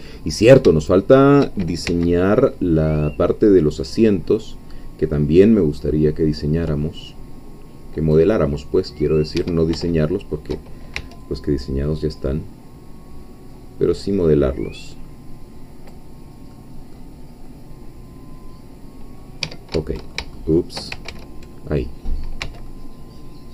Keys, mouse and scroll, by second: 0.0 scroll down 2, 0.8 shift+middle click, 1.9 shift+c, 2.4-9.6 drag, 9.4 Escape, 9.8-10.9 shift+middle drag, 10.9 shift+c, 11.2-16.1 drag, 16.5 middle click, 17.6-19.3 middle drag, 19.4 Escape, 19.7 Caps_Lock, 19.8 middle click, 20.4 shift+middle click, 21.1 ctrl+shift+z, 22.4 c, 22.7-23.5 drag.